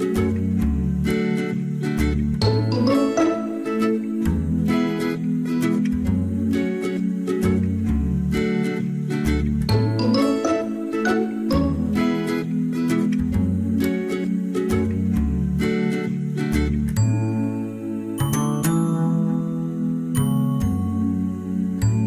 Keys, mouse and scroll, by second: 0.3 ctrl+z, 0.4 ctrl+z, 16.7 ctrl+-, 18.9 ctrl+-, 19.1 space, 21.1 ctrl+z.